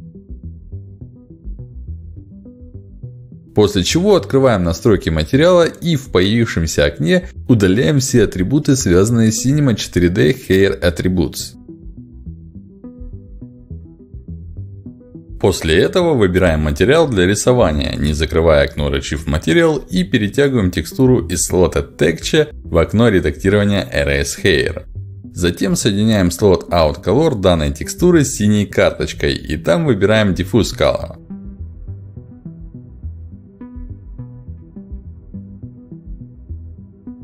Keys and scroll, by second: 13.3 Delete, 28.1 ctrl+alt+d, 29.9 ctrl+alt+d.